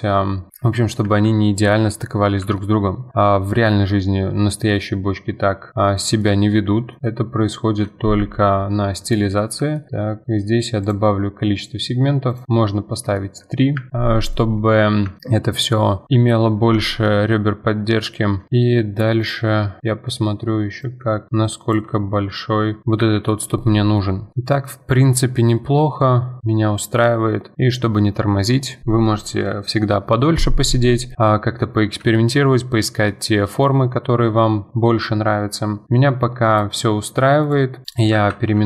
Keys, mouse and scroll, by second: 0.5 click, 1.0 F4, 1.4-2.9 middle drag, 2.9 scroll up 2, 3.1-3.5 middle drag, 3.5 scroll up 1, 3.8-8.2 middle drag, 8.2 F4, 8.5-10.8 middle drag, 10.8 click, 12.6-13.7 middle drag, 13.7 F4, 13.9-15.2 scroll down 6, 14.0-14.3 middle drag, 15.2-16.1 shift+middle drag, 16.1 F4, 16.3-16.9 scroll up 2, 16.9-18.8 shift+middle drag, 19.2 click, 19.8-20.8 middle drag, 20.8-22.8 shift+drag, 22.8 scroll down 4, 23.0 F4, 23.3-24.0 middle drag, 24.0-24.3 scroll down 2, 24.3 scroll up 4, 24.3-25.4 middle drag, 25.4-25.7 scroll down 5, 25.7 scroll up 1, 25.8-26.7 middle drag, 26.7 scroll up 4, 27.0-29.2 middle drag, 31.6-34.9 middle drag, 34.2-36.5 scroll down 2, 36.5-37.9 drag, 37.8 middle click, 38.1 F2.